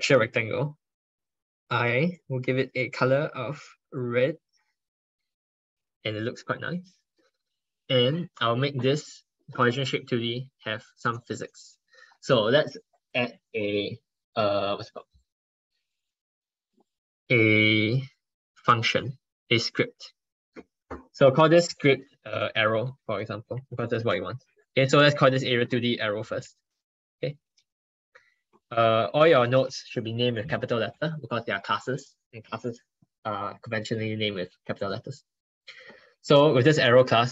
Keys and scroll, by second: 23.6 ctrl+BackSpace, 28.4 ctrl+BackSpace, 28.6 ctrl+BackSpace.